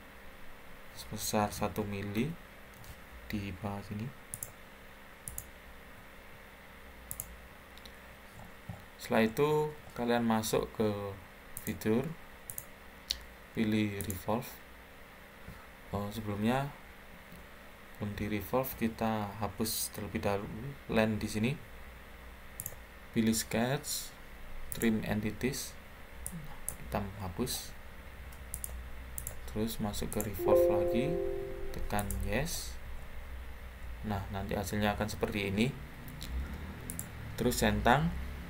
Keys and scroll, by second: 2.1 1, 17.0 Escape.